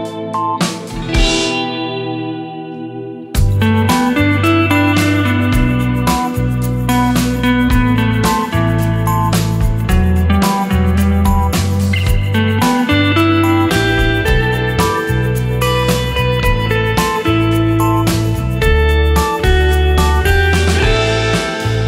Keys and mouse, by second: 6.1 space, 8.5 space, 11.2 click, 13.8-14.3 middle drag, 15.0-15.9 middle drag, 17.5-18.0 shift+middle drag, 20.7-21.8 drag.